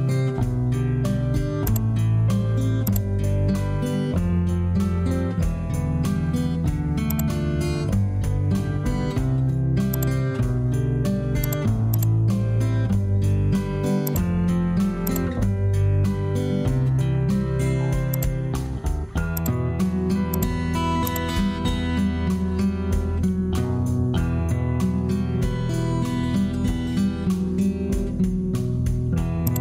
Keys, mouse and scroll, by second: 4.7 ctrl+space, 28.2 Return.